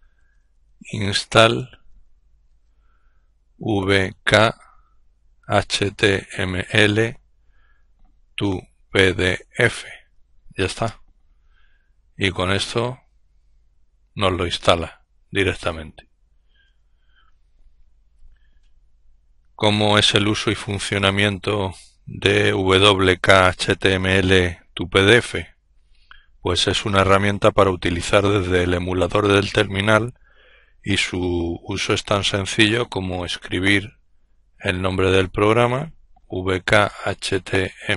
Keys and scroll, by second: 0.0-1.9 typing, 3.2-3.8 typing, 5.0-6.3 typing, 7.6-9.4 typing, 10.3 Return, 12.7 typing, 16.2 ctrl+l, 35.7-37.9 typing.